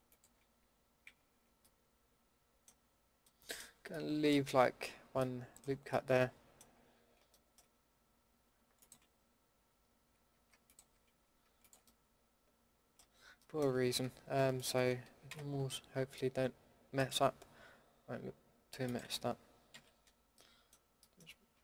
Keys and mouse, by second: 1.0 ctrl+z, 3.4 middle click, 8.7-10.3 middle drag, 10.3 a, 12.2 middle click, 15.3 ctrl+x, 19.7 ctrl+x, 19.9-20.5 middle drag.